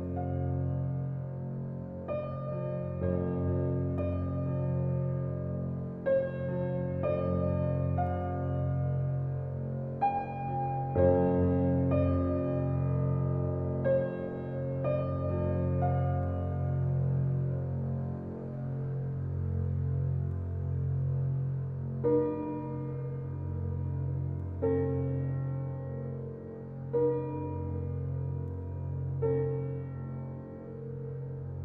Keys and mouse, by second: 0.9 click, 1.1 2, 1.6 click, 2.0 shift+click, 2.2 shift+click, 2.8 s, 6.1 Tab, 6.3 click, 7.2-9.0 drag, 9.8 click, 10.1 g, 12.9 click, 13.8-14.3 drag, 15.0 click, 15.4 r, 18.9 click, 19.6-21.5 drag, 22.0 click, 23.5 click, 24.8-26.7 drag, 27.9-30.4 drag.